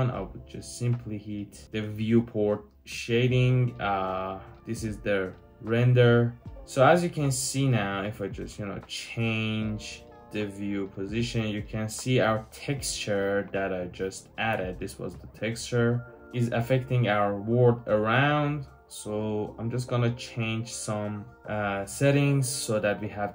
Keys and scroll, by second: 13.8-14.9 typing, 16.2 typing.